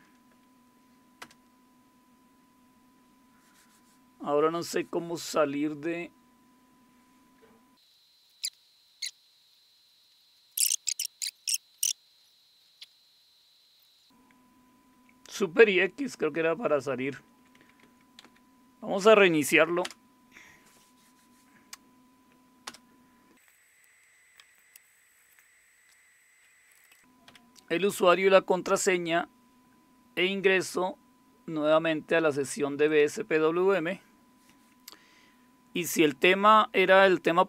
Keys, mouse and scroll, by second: 0.0-0.2 typing, 1.2 Return, 8.0 click, 8.1 click, 8.7-9.2 scroll down 1, 9.2-10.3 scroll down 1, 10.3-12.2 scroll up 1, 12.2 ctrl+super+q, 12.6 ctrl+super+q, 13.1 click, 13.6 super+c, 13.8 shift+super+x, 16.9 Right, 17.2 Right, 17.4 Right, 17.5 Right, 17.8-18.1 Right, 18.2 Left, 19.8 Return, 22.7 Return, 24.7 Return, 26.7-27.8 typing, 32.9 click.